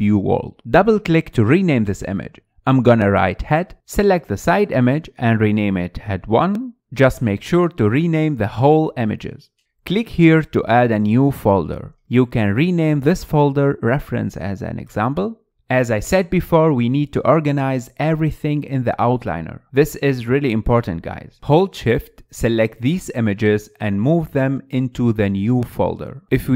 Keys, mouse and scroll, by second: 1.2-4.5 drag, 6.0 click, 6.4-7.7 drag, 7.9 click, 8.2 click, 9.6 click, 13.2-14.5 drag, 20.6 click, 21.6 shift+click, 22.3 shift+click, 23.0 shift+click, 24.0 click.